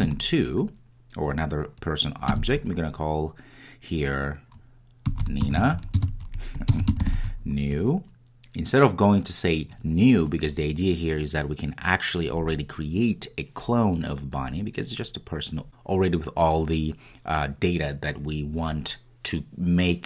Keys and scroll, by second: 0.0 Return, 0.2 Return.